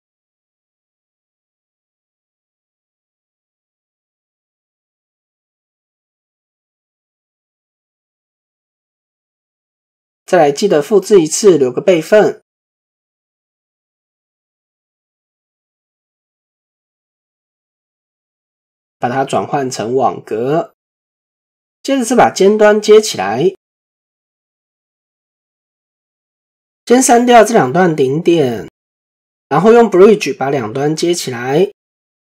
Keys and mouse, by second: 0.8 shift+click, 1.5 shift+click, 3.0 click, 4.3 shift+click, 4.9 shift+click, 5.6-7.1 drag, 9.1 Tab, 9.6 shift+middle click, 13.6 click, 14.2 drag, 14.8-16.8 drag, 17.5 click, 18.2-20.1 drag, 20.7 shift+middle click, 21.3 Tab, 22.4 shift+middle click, 30.0 alt+click, 32.2-32.3 right drag.